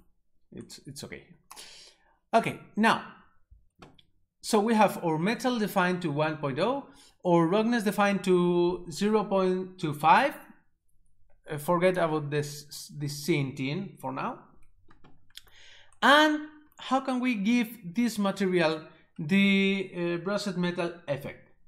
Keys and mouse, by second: 1.5 right click, 11.7 click.